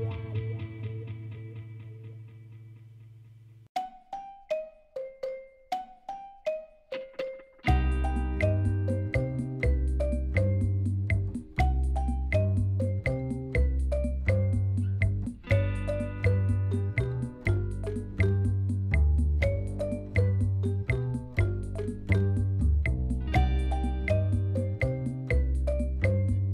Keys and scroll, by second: 0.5 Tab, 2.7 ctrl+r, 3.4 Return, 3.9 s, 6.4 ctrl+r, 7.2 ctrl+r, 7.6 2, 7.7 Return, 8.6 ctrl+r, 8.9 Return, 9.4 3, 10.0 alt+a, 10.2 shift+z, 13.6 k, 16.5 Return, 17.0 shift+z, 22.4 ctrl+-, 24.9 x.